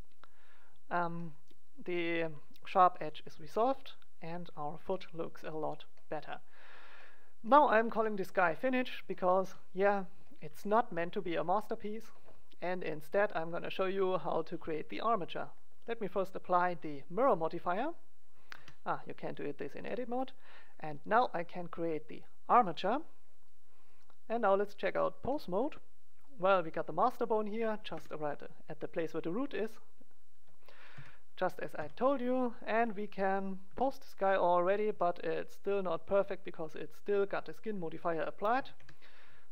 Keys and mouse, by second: 0.5 click, 1.3-2.5 middle drag, 3.2 click, 3.8-5.0 middle drag, 15.3-17.1 drag, 17.2-18.5 drag, 18.5 Tab, 19.8-21.7 drag, 22.5 click, 26.5 g, 26.9 right click, 30.9 KP_1, 31.7 KP_3, 32.8-34.2 drag, 33.6 g, 34.8 middle click, 34.8 g, 36.2-37.7 middle drag, 38.5 a, 38.7 a.